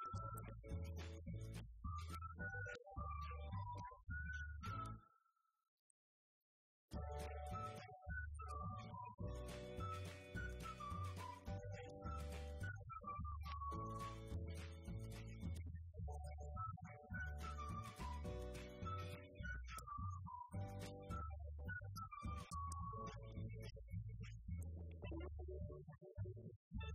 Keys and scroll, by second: 0.1 =, 3.2 Left, 7.1 *, 8.4 Left, 12.3-14.0 typing, 14.8 Return, 16.2 Up, 19.6 Down, 19.8 Right, 20.2 Left, 21.9 Left, 22.2 Up, 23.5 5, 24.1 Return, 25.1 Right, 25.6 Up, 25.8 Left.